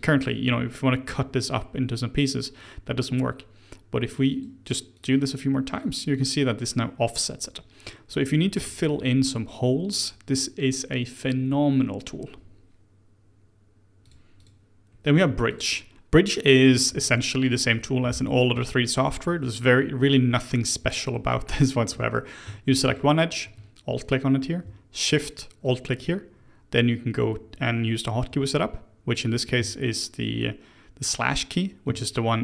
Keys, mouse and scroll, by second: 4.0-6.8 drag, 6.8-9.8 middle drag, 14.0 click, 14.4 click, 14.8-15.2 scroll down 2, 15.2 Tab, 15.5 click, 15.8 middle drag, 15.9 Tab, 20.0 Tab, 22.8 alt+click, 25.6 alt+shift+click, 29.5 ctrl+z.